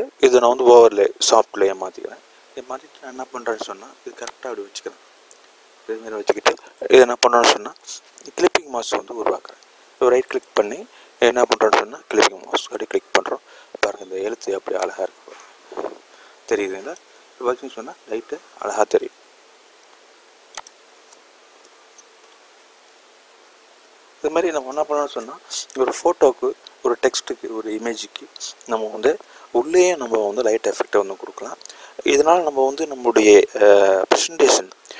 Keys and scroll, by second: 33.3 n.